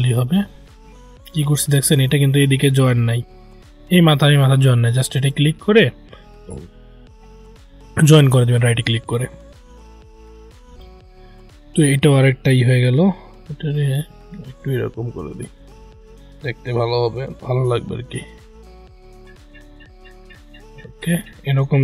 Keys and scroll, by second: 1.4 ctrl+z.